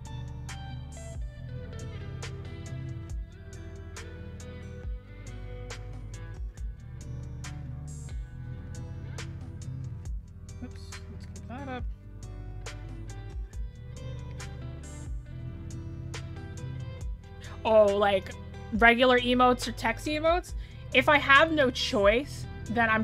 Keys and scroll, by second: 7.8 scroll down 1, 9.1-9.9 scroll up 1.